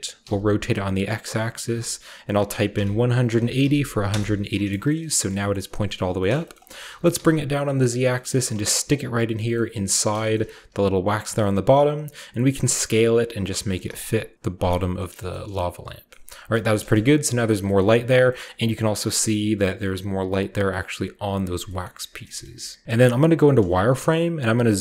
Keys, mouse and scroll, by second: 0.0-0.2 typing, 2.7-3.6 typing, 4.1 Return, 4.8-6.2 middle drag, 5.6-7.9 shift+scroll up 1, 6.0-10.7 typing, 6.3 middle click, 6.6-7.9 middle drag, 8.9 drag, 10.3-12.9 shift+middle drag, 10.3-12.9 shift+scroll up 1, 13.4 click, 13.6 g, 13.9 z, 14.6 click, 14.8 middle drag, 15.1-15.6 scroll down 1, 16.1-17.7 shift+middle drag, 16.3 a, 16.8 KP_0, 17.6-19.8 scroll up 1, 17.8-18.3 middle drag, 18.4-19.8 middle drag, 20.3-21.6 scroll down 1, 21.8-22.8 middle drag, 21.9-22.8 scroll down 1, 22.0-23.8 typing, 23.4-24.8 shift+middle drag, 23.6-24.5 shift+scroll up 1, 24.5-24.8 shift+scroll up 1.